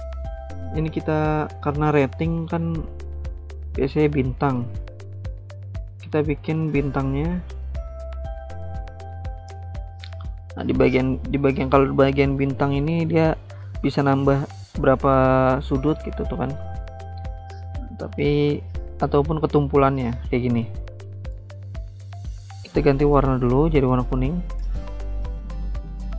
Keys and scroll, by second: 4.7 ctrl+z, 16.2 ctrl+z.